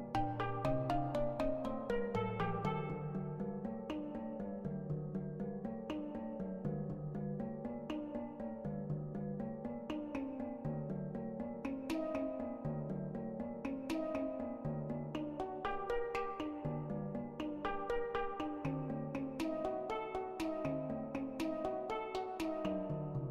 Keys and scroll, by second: 2.6 ctrl+z, 8.3 ctrl+z, 8.6 ctrl+z, 11.1 ctrl+z, 11.2 [, 17.5 Caps_Lock, 20.2 ], 20.5 ].